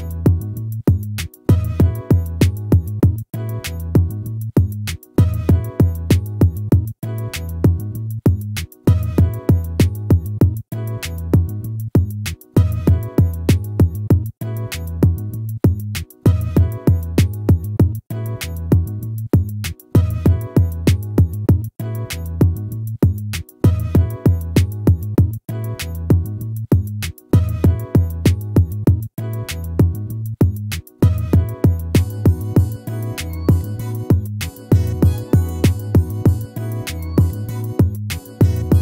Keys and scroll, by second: 6.9 ctrl+-, 11.3 ctrl++.